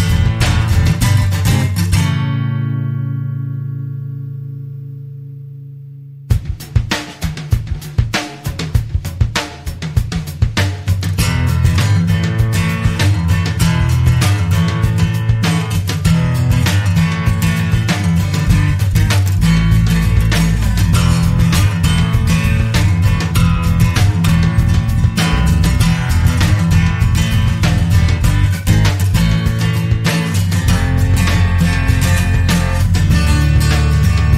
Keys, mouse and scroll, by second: 1.1 click, 5.2-5.6 scroll up 1, 6.5 click, 15.9 click, 17.8 click, 21.9 click, 22.5 click, 24.0 click, 24.6 click, 28.4 click, 32.7 click.